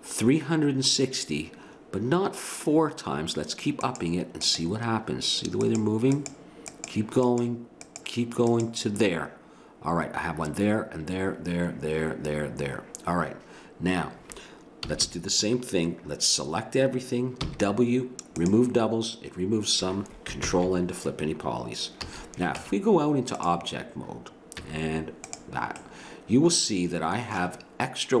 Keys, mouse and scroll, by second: 3.8-5.3 drag, 14.8 a, 15.0 a, 17.4 w, 20.5 ctrl+n, 22.1 a, 22.6 Tab, 24.6 z, 26.0-27.8 middle drag.